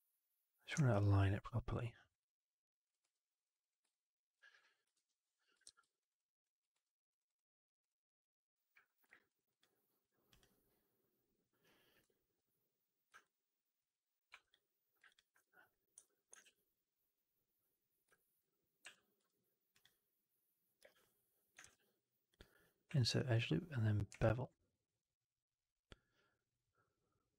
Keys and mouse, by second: 0.8 alt+right click, 1.0-2.7 alt+drag, 2.9 2, 3.3 click, 3.8 alt+click, 4.9 ctrl+BackSpace, 5.7 shift+x, 5.8 alt+right click, 6.0 alt+click, 6.6 2, 7.0 click, 7.1 click, 8.6 typing, 9.7 ctrl+shift+click, 10.2 click, 11.9 space, 13.1 alt+click, 14.4 3, 16.1 2, 16.3 shift+f, 18.0 alt+click, 18.7 w, 19.0 2, 19.7 click, 20.7 space, 21.5 shift+f, 22.5 click, 22.8 w, 23.0 alt+click, 24.2 alt+b.